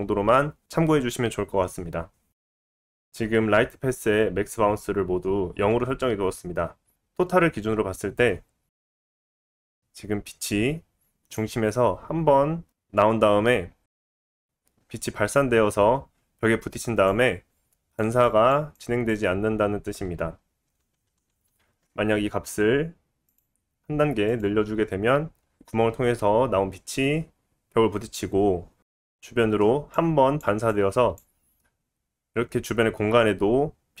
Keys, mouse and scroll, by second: 20.8 ctrl+z, 21.1 ctrl+z, 21.4 ctrl+z, 29.1 ctrl+z.